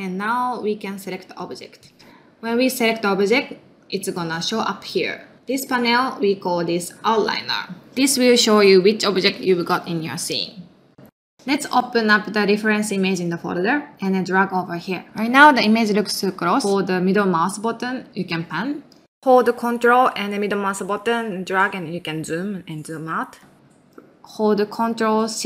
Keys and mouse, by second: 22.9-25.4 ctrl+middle drag.